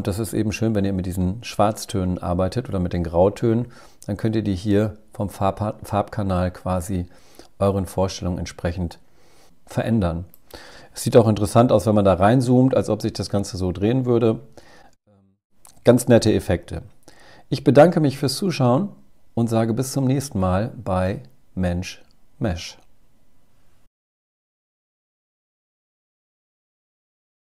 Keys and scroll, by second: 10.4 super++, 11.0 super++, 11.8 super++, 12.4 super++, 12.6 super++, 12.8 super++, 13.3 super++, 13.8 super++.